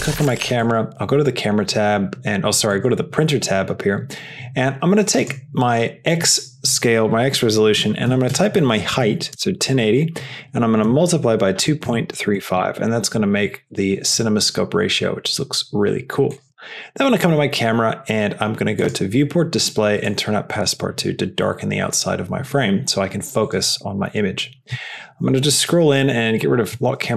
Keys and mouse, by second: 5.1-13.6 drag, 18.7 click, 20.0-21.3 drag, 27.0 n.